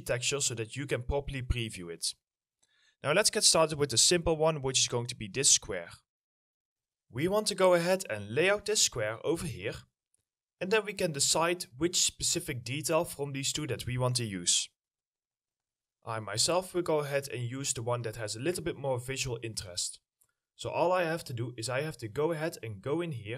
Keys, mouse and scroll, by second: 4.3 double click, 5.0-5.6 scroll up 1, 5.6 w, 8.4 middle click, 9.4 ctrl+click, 11.6 middle click, 11.8-12.4 scroll up 1, 12.4 middle click, 19.5 middle click, 19.8-20.9 scroll up 1, 20.9 middle click, 21.3-23.3 scroll up 1.